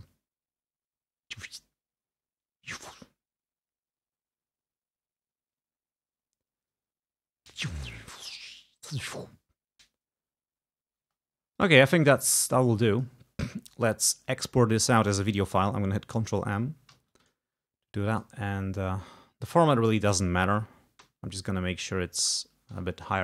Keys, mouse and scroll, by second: 11.1 space, 11.7 click, 11.9 space, 12.3 click, 17.0 ctrl+m, 18.2 click, 19.5 click, 20.6 2, 21.1 0, 21.6 click, 22.8 4.